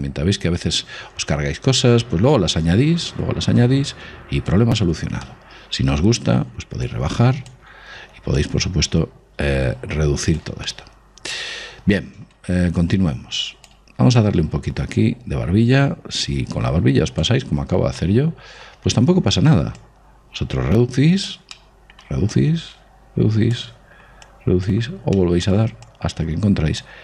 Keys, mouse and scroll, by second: 1.6 click, 5.5-7.1 middle drag, 7.1-10.5 drag, 10.9-12.6 middle drag, 13.1-16.3 drag, 17.8-18.3 scroll up 2, 18.3-21.0 middle drag, 20.1 click, 21.8-23.8 middle drag, 22.6-27.0 drag, 25.5-27.0 middle drag.